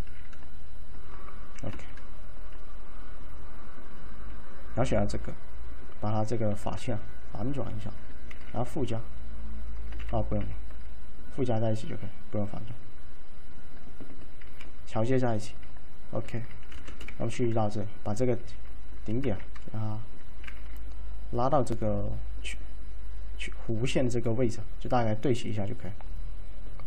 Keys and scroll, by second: 0.0-2.3 typing, 6.2-7.0 typing, 8.4 alt+z, 10.1 ctrl+z, 10.5 ctrl+z, 14.5 ctrl+q, 16.8-17.1 typing, 19.4 shift+1, 20.5 !.